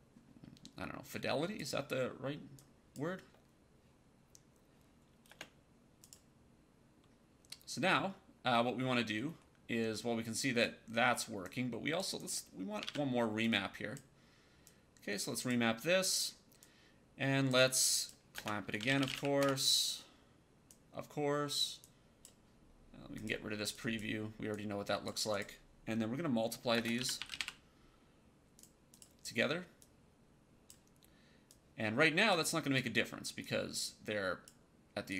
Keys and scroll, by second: 5.2 space, 12.8 ctrl+d, 18.2-19.5 typing, 26.6-28.5 typing.